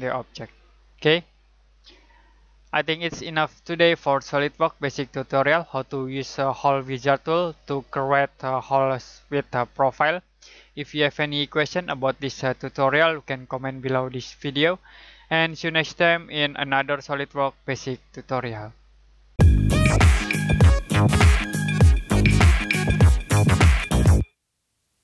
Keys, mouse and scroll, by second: 1.0 middle click.